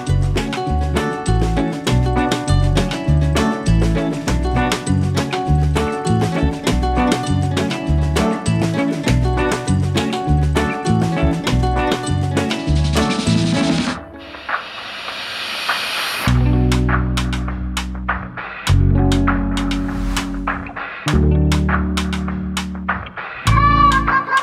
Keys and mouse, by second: 5.5 click, 7.7 right click, 9.0 click, 11.5 click, 12.5 click, 13.4 click, 16.2 right click, 17.6 click, 19.1 click, 20.5 click, 21.9 click.